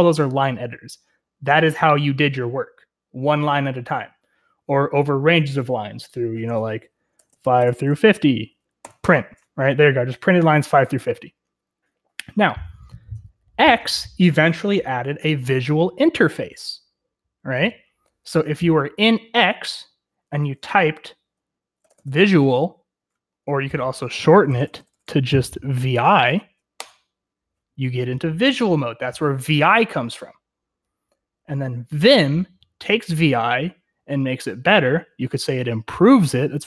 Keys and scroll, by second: 6.9-9.0 typing, 21.5-22.7 typing, 24.4-24.9 typing, 26.7 Return.